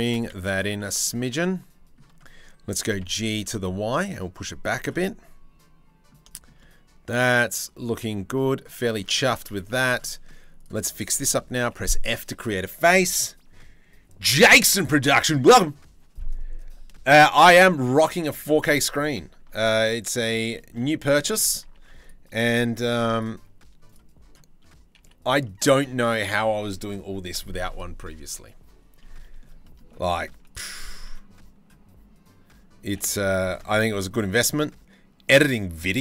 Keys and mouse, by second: 0.4-1.6 drag, 2.4 g, 3.2-4.5 shift+middle drag, 4.6 click, 5.2 middle click, 5.3 click, 5.8 shift+middle click, 7.6 shift+middle click, 7.9 click, 8.5 click, 9.3 2, 10.2-11.2 right drag, 11.2 f, 17.2 click, 17.4 shift+middle click, 17.9 click, 19.2 ctrl+r, 20.0 shift+middle click, 20.4 click, 20.8 shift+middle click, 21.5 ctrl+r, 22.3 2, 23.5-24.6 drag, 24.6 f, 25.0 click, 28.6 click, 29.2 shift+middle click, 29.6 click, 30.0 click, 32.4 g.